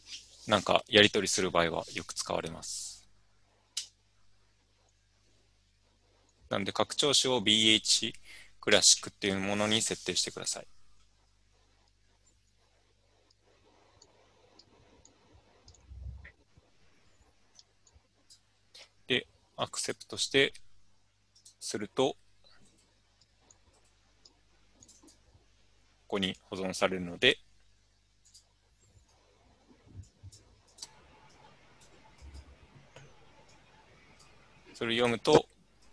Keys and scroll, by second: 1.9-2.7 Left, 3.1 Right, 3.6 Right, 3.8 BackSpace, 4.4-5.3 Right.